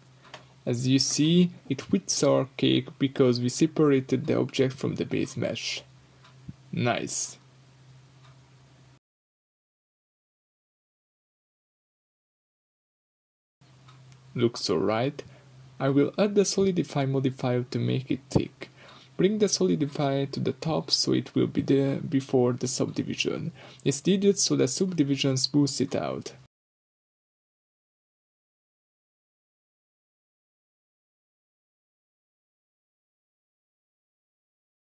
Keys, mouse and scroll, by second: 0.0-0.9 scroll up 2, 0.6-1.9 middle drag, 1.9-8.4 drag, 9.2 click, 9.8-13.1 middle drag, 10.2-10.9 scroll up 4, 13.1 scroll up 2, 13.1-14.3 middle drag, 14.3-17.9 shift+drag, 17.7 scroll down 2, 17.9-25.8 middle drag, 23.1 scroll down 2, 24.4 g, 25.8 click, 25.9-29.0 middle drag, 29.0-31.4 shift+drag, 31.4-34.3 middle drag, 34.3 click.